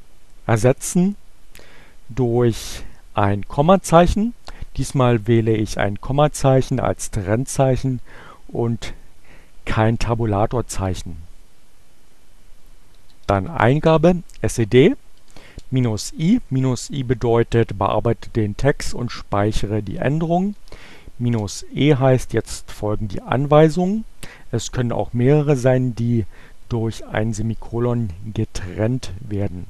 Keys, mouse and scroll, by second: 10.9 s, 13.1-14.9 typing, 18.6-19.4 typing, 21.3 space.